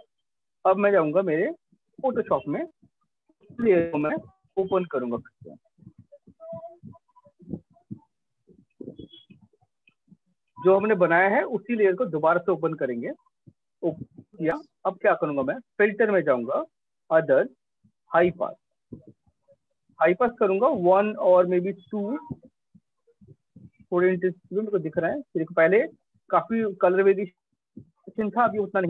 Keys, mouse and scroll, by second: 0.2 alt+Tab, 1.4 alt+click, 3.9 click, 15.2 click, 16.8 click, 17.8 click, 22.7 click, 24.3 click, 25.8 click, 27.0 click.